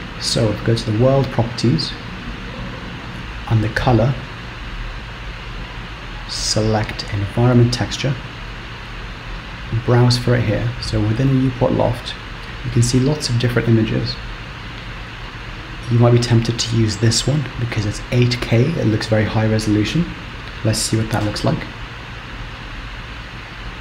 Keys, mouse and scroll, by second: 1.0 click, 3.2 ctrl+z, 4.2 click, 9.6 click, 21.6 z, 23.6 z.